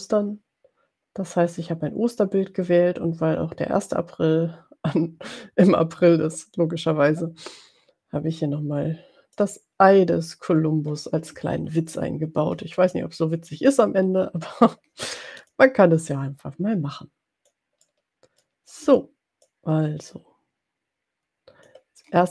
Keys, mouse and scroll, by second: 9.6 click, 11.7-12.5 ctrl+scroll down 4, 13.0-14.0 drag, 14.1-14.8 ctrl+scroll down 2, 15.7 click, 16.2-17.8 drag, 17.9 middle click, 19.8-22.0 ctrl+drag.